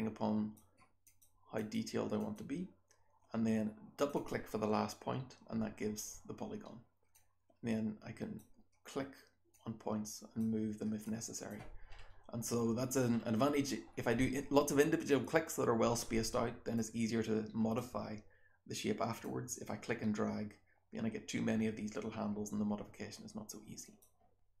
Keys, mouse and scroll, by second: 1.0 click, 1.5 click, 2.1 click, 3.9 click, 4.1 click, 7.1-8.3 drag, 9.5-10.3 drag, 11.0 click, 11.8-12.5 scroll up 1, 12.5-13.1 scroll down 2, 13.1-13.8 scroll up 2, 13.8-16.7 scroll down 2, 16.7-17.7 drag, 16.7-17.7 scroll down 1, 17.7-19.2 scroll down 1, 19.2-23.9 drag, 19.2-23.9 scroll down 1, 23.9-24.6 scroll down 1.